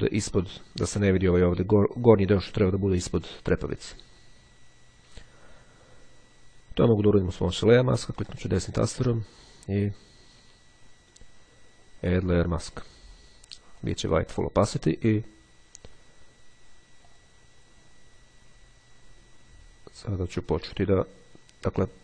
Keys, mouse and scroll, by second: 7.0 click, 7.5-8.9 drag, 12.2 click, 13.9 click, 17.1 click.